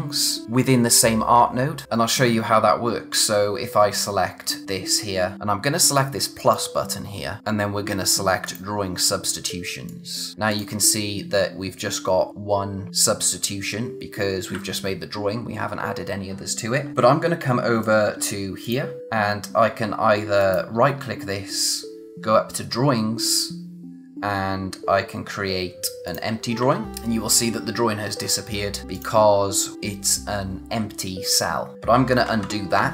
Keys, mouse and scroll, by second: 3.9 click, 6.4 click, 8.4 click, 17.8 click, 20.4 right click, 26.0 click, 28.9 click, 32.2 z.